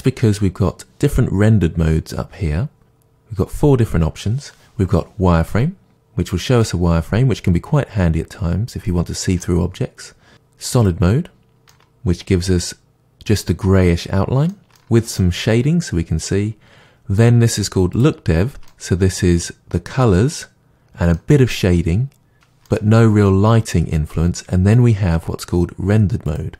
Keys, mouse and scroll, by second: 5.4 click, 6.6-10.7 middle drag, 10.7 click, 11.7-18.0 middle drag, 18.0 click, 18.7-26.3 middle drag, 26.3 click.